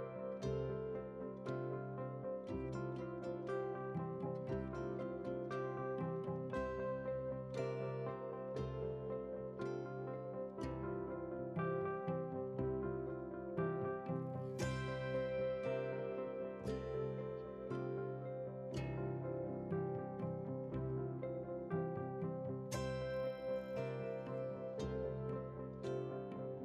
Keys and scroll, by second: 11.0 ctrl+c, 12.8 F8, 14.1 ctrl+v, 14.8 ctrl+space.